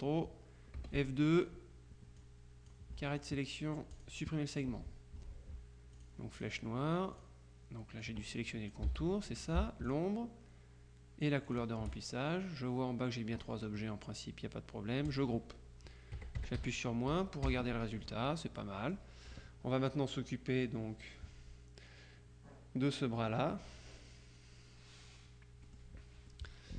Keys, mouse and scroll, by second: 0.8 F2, 1.4 click, 2.2-3.2 drag, 4.0 click, 6.0 click, 7.2 click, 8.1-9.3 drag, 9.0 ctrl+z, 10.0 shift+click, 11.5 click, 15.1 click, 16.2 KP_Subtract, 17.2 t, 17.5 KP_Subtract, 18.7 click, 19.5-25.7 middle drag, 25.7 click, 26.5-26.7 drag.